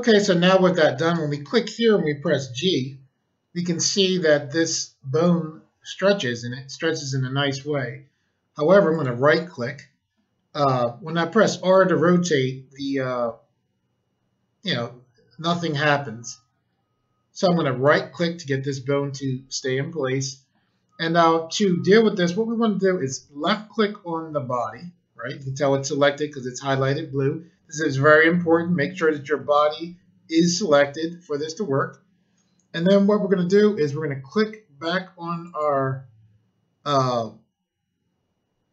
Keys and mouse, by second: 1.0 click, 1.1 click, 2.2 g, 8.8 right click, 11.1 r, 17.8 right click, 23.3 click, 23.5 click, 24.5 click, 35.4 click.